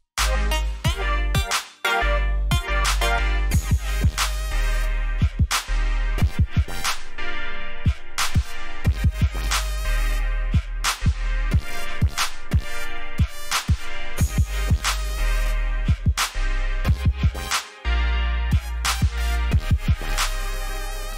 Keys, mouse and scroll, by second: 0.5 right click, 4.5 click, 7.0 alt+scroll up 1, 7.5-7.9 alt+scroll down 1, 8.1 alt+scroll down 1, 8.7 c, 11.8 click.